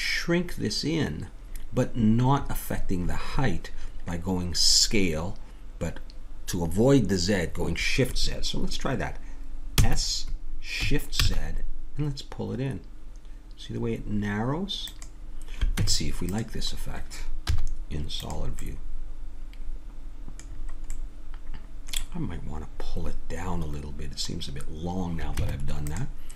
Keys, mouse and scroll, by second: 9.7 s, 15.8 Tab, 17.4 z, 18.7 middle click, 20.4 middle click, 23.4-25.4 middle drag, 25.4 Tab.